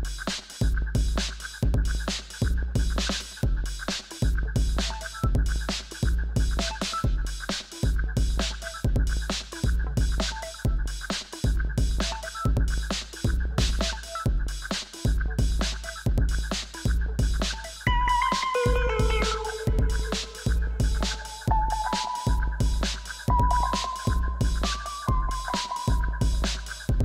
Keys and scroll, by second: 1.1 f, 2.3 Return, 5.4 5, 5.5 Return, 7.1-10.6 typing, 7.2 Return, 11.7 ctrl+t, 15.0 3, 15.3 Return, 20.2 2, 20.3 Tab, 20.5 4, 20.7 Tab, 21.3 Tab, 21.5 3, 21.7 Return, 23.2 ., 23.3 5, 23.4 Return, 24.2 ., 24.3 1, 24.4 Return.